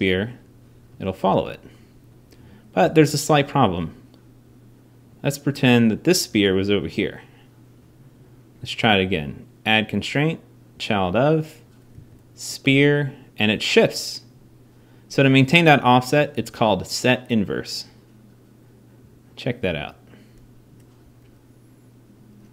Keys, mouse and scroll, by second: 1.0 g, 3.0 super+z, 6.1 g, 19.4 r.